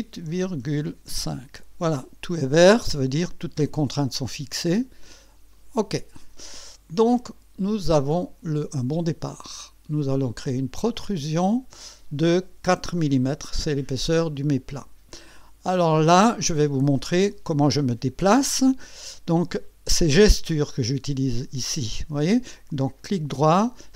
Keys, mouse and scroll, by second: 0.3 KP_Decimal, 0.6 KP_5, 1.1 KP_Enter, 5.5 click, 7.0-8.5 drag, 10.9 click, 11.5 click, 12.9 KP_4, 14.3 click, 14.3 middle click, 15.1 click, 23.0 right click.